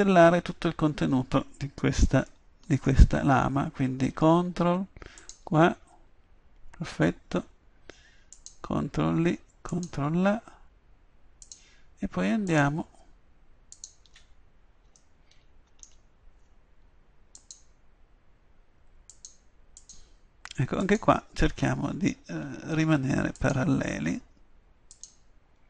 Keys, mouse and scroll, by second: 5.2-15.4 drag, 17.4-19.1 drag, 23.4-25.6 drag.